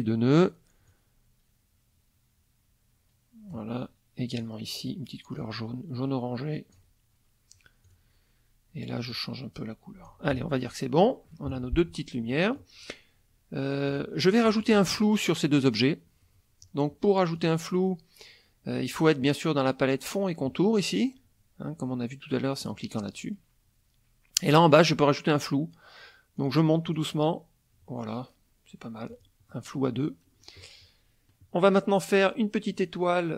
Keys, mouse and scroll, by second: 0.9-3.7 drag, 4.3 click, 5.4-6.9 drag, 7.8 click, 9.1-10.2 drag, 10.3 F1, 10.6 click, 11.5 KP_Subtract, 12.3 middle click, 13.9 click, 14.5 shift+click, 17.3 click, 22.6 click, 26.3 click, 26.8 click, 29.1 click, 29.5 middle click.